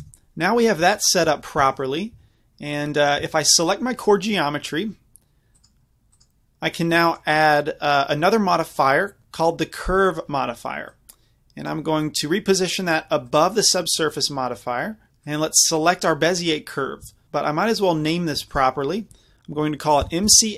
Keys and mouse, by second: 0.0 KP_5, 0.9 z, 1.3 z, 1.6 Tab, 2.2 z, 3.1 middle click, 5.7-9.8 drag, 10.9-15.0 drag, 15.3-17.6 drag, 18.5-20.5 drag.